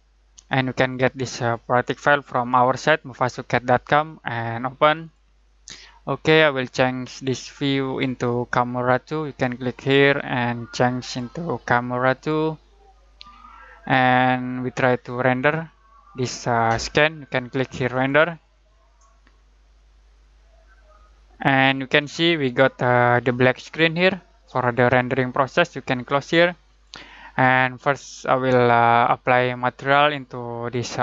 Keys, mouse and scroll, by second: 5.0 click, 9.7 click, 17.9 click, 26.8 click.